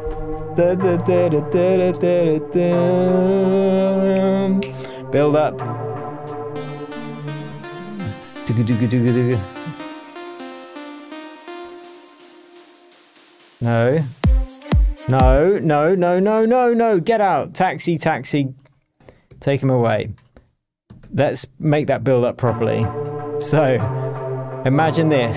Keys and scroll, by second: 15.3 space, 20.2 super+i, 21.0 super+d.